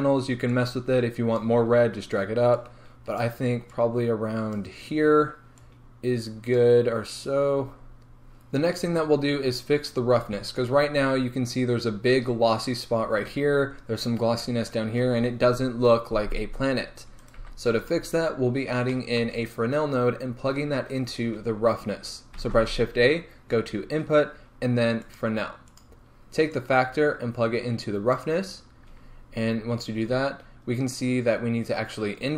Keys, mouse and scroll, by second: 1.4-10.7 drag, 7.7 scroll down 2, 7.9-10.5 scroll up 2, 10.5 scroll up 1, 10.7-11.1 scroll down 2, 11.1-13.5 scroll up 2, 13.5 scroll down 2, 28.2-32.3 drag, 29.3-29.8 scroll up 1.